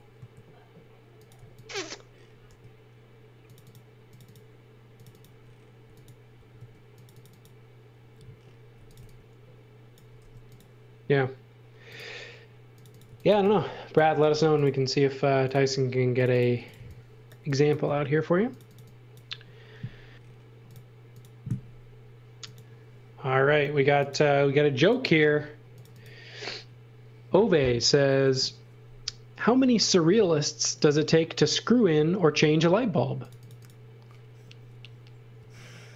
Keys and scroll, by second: 1.3 x, 2.5 b, 5.8 x, 6.3 v, 6.5 space, 8.5-10.2 typing, 12.8-14.2 typing, 16.3-17.8 typing, 35.3 a.